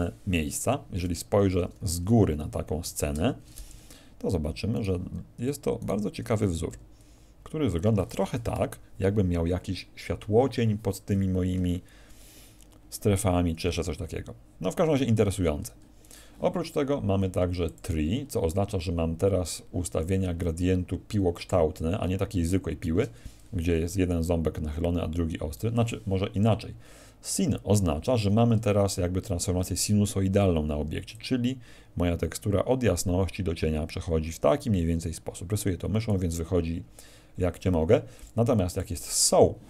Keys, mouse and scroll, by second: 1.0 Escape, 1.7 KP_1, 2.1 KP_7, 3.0 ctrl+shift+KP_0, 4.7 right click, 5.7 right click, 6.7 g, 8.0 click, 15.1 Escape, 16.0 right click, 17.6 click, 27.2 click, 30.8 d, 31.1 click, 31.1 d, 36.1 d, 37.7 d, 38.1 click, 38.7 click.